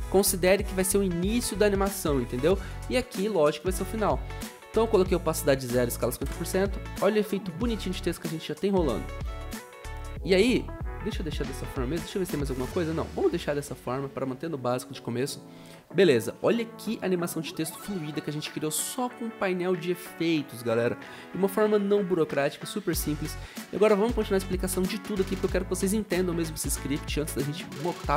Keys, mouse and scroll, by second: 15.7 o, 16.2 o.